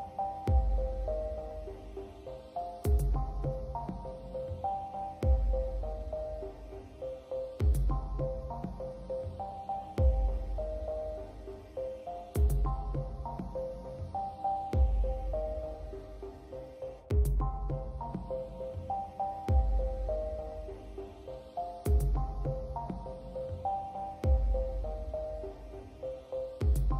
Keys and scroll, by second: 5.9 space, 11.8 space.